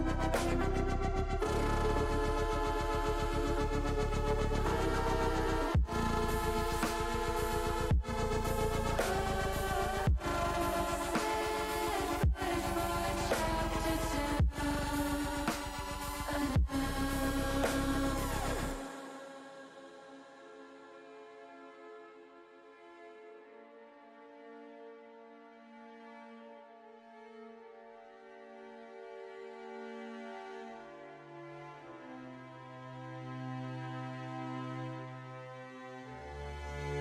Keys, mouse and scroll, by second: 2.9 click, 8.5 l, 9.3 click, 16.4 click, 18.0 shift+middle click, 19.5 shift+middle click, 23.2 l, 24.0-25.6 drag, 26.3 click, 28.3 l, 30.5 l, 32.8 p, 36.3 Tab.